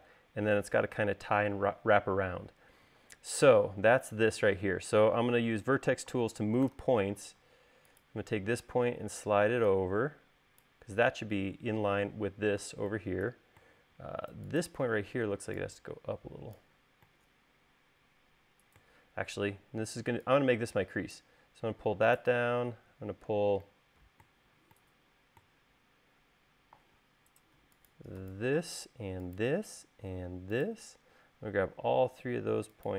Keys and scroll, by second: 3.4 u, 7.0 v.